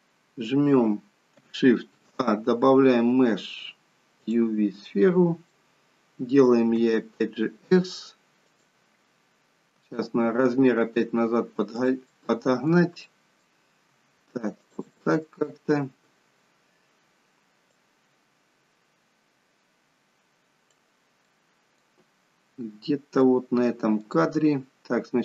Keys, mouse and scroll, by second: 2.0 shift+a, 4.9 middle click, 5.8-6.3 scroll down 2, 6.8 s, 9.9 g, 12.2 middle click, 13.1 middle click, 14.0 g, 15.0 middle click, 18.0 click, 21.3 middle click, 22.7-23.3 scroll up 4, 23.3 middle click, 24.3-25.2 scroll down 2.